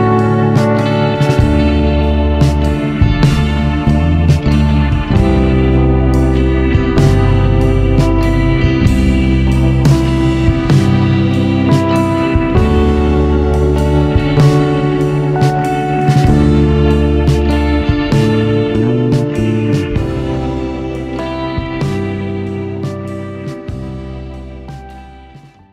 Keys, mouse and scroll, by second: 2.0 scroll down 1, 3.3 click, 4.2-6.2 drag, 6.2 KP_0, 6.7-8.4 scroll down 3, 8.4-13.3 drag, 14.3-15.5 scroll up 3, 15.5 click.